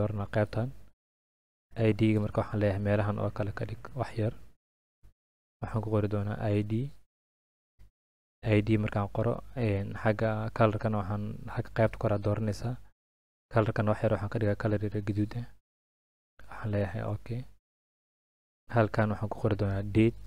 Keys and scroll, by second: 10.1 ctrl+a.